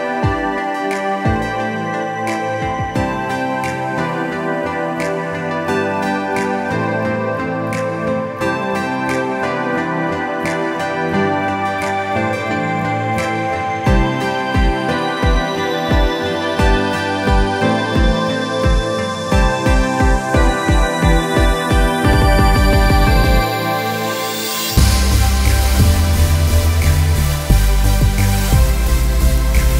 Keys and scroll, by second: 2.4 Return, 9.1 ctrl+KP_Add, 9.4 ctrl+KP_Add, 9.9 ctrl+KP_Add, 10.3 ctrl+KP_Add, 12.1 ctrl+KP_Add, 12.4 ctrl+space, 17.3 alt+space, 21.1 space, 25.4 space, 29.3 ctrl+Return.